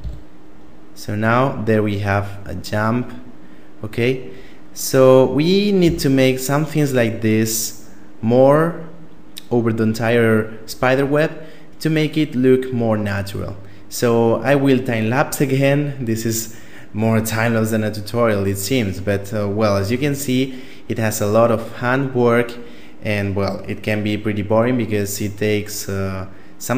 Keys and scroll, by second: 5.6 a.